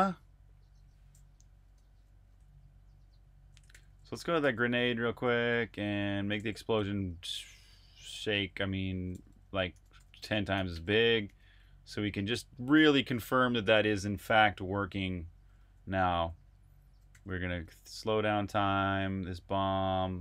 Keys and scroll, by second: 1.7 Escape, 3.7 super+j, 3.8 super+j, 4.5 super+j, 5.4 super+j, 5.8 super+k, 6.4 super+j, 7.0-12.4 typing, 16.1-18.4 typing.